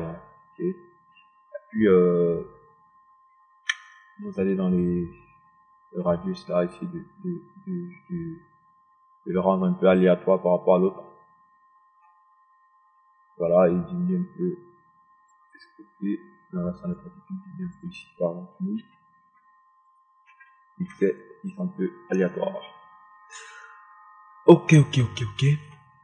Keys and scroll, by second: 19.8 KP_1, 20.0 KP_0, 21.1 KP_1, 21.4 0.